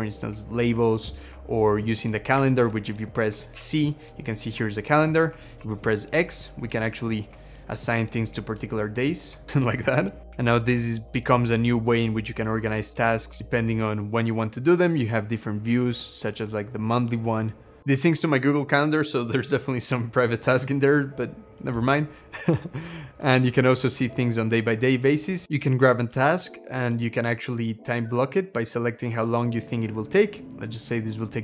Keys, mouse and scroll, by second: 1.2-1.7 scroll down 11, 2.2 Escape, 3.4 c, 5.4 x, 10.7 scroll down 1.